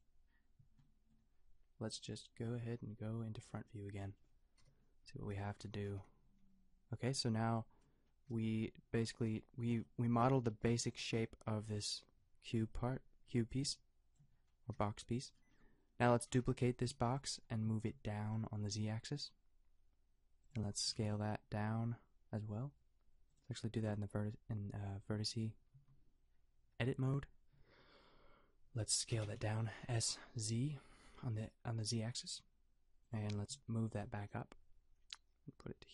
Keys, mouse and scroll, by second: 4.6 KP_5, 5.6 Tab, 6.3 g, 8.3 g, 9.3 g, 10.6 g, 14.7 g, 15.3-16.8 drag, 16.8 shift+d, 17.6 g, 21.0 s, 25.1 Tab, 25.7 a, 29.2 s, 33.4 g.